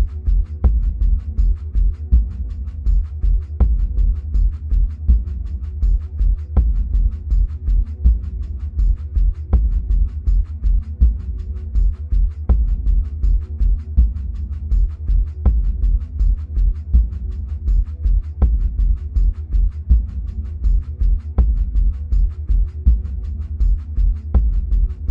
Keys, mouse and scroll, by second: 1.6 ctrl+b, 5.3 click, 8.3 Tab, 9.0-24.6 middle drag, 9.8-10.5 scroll down 2, 10.5-13.8 scroll up 2, 13.8 Tab, 24.6 click.